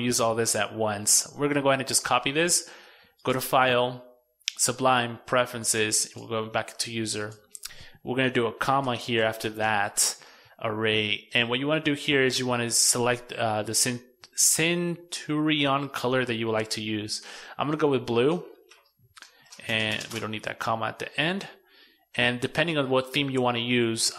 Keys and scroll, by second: 0.9 super+c, 8.6 super+v, 17.4 super+x.